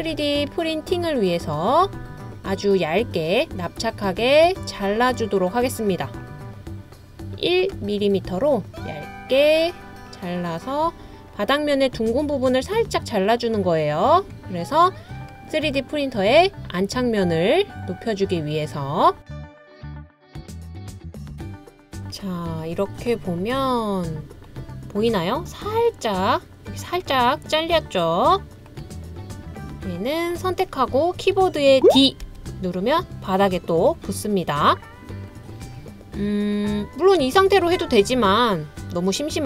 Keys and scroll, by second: 32.2 d.